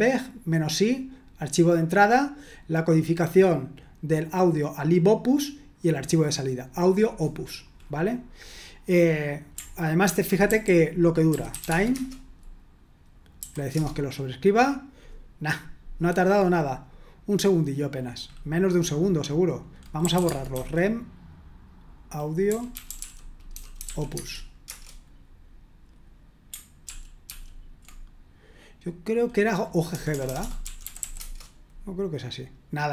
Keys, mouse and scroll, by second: 6.7 click, 10.0 ctrl+a, 10.5-12.1 typing, 13.3 typing, 13.7 Return, 19.7-21.0 typing, 22.2-24.3 typing, 24.7 Return, 26.9 ctrl+p, 27.3 ctrl+p, 29.9-31.4 typing.